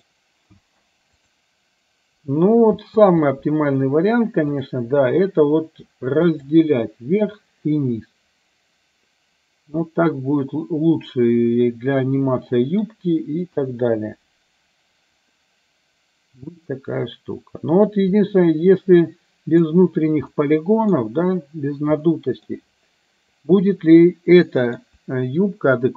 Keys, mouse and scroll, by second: 0.6 space, 2.9 space, 6.3 click, 10.0-12.9 middle drag, 13.5 KP_1, 15.4-18.0 middle drag, 19.1-19.6 middle drag, 20.5-21.0 middle drag, 22.1-22.6 middle drag, 24.0-24.8 middle drag.